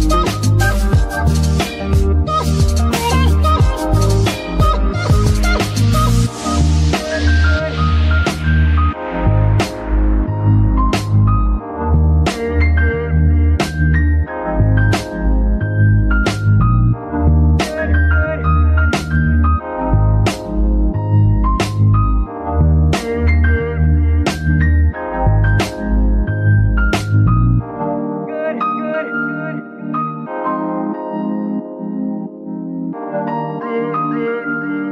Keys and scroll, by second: 2.0 z, 9.0 Tab, 32.1 z.